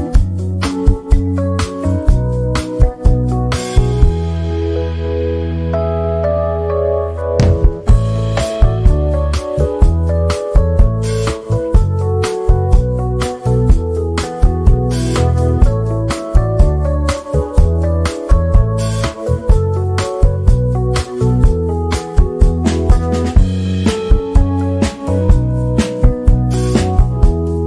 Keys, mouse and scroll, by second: 0.2 z, 0.4 click, 2.1 F10, 3.3 ctrl+q, 4.0-8.6 drag, 8.6-10.1 drag, 10.1-10.5 shift+scroll down 1, 11.7 shift+scroll down 1, 12.1 z, 12.4 click, 13.3 F10, 14.5 click, 14.5 click, 18.0-19.6 drag, 19.6-21.2 drag, 21.2 click, 22.1 ctrl+z, 22.7 ctrl+a, 23.5 click, 24.6 F10, 26.1-27.6 drag.